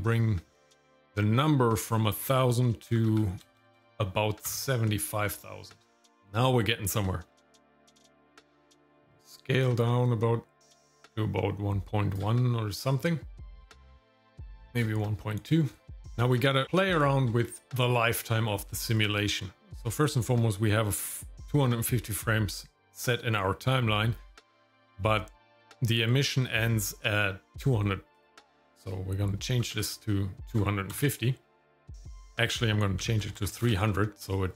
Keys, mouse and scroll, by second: 1.8-4.5 drag, 3.6 KP_0, 3.8 KP_0, 7.4-12.2 shift+drag, 14.2 shift+click, 16.2-16.7 scroll down 3, 16.5 middle click, 17.0 shift+middle click, 17.4 scroll down 1, 17.7 scroll up 2, 18.2 middle click, 28.2-31.0 drag, 32.1-33.8 drag, 33.4 KP_0.